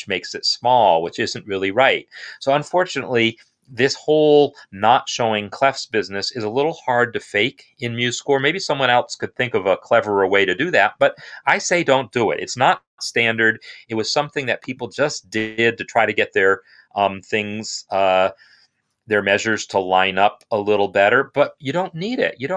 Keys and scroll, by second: 12.5 BackSpace, 15.6 BackSpace.